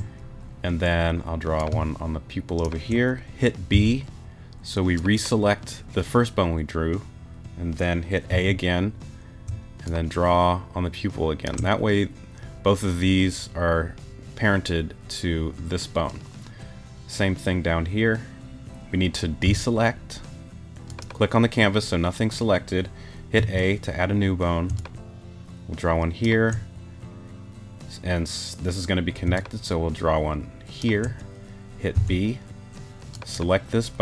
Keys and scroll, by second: 3.7 shift+b, 8.3 a, 19.4 b, 23.4 a, 31.9 shift+b.